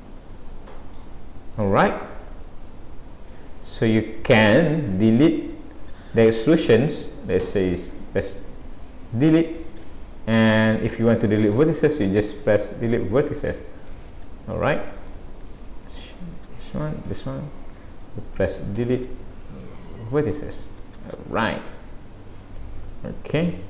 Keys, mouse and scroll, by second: 1.5-2.3 scroll down 4, 2.3 middle click, 4.8-5.1 scroll up 1, 7.4 x, 9.4 Delete, 13.4 ctrl+z, 15.0 click, 15.9 shift+click, 18.8 Delete, 20.4 middle click.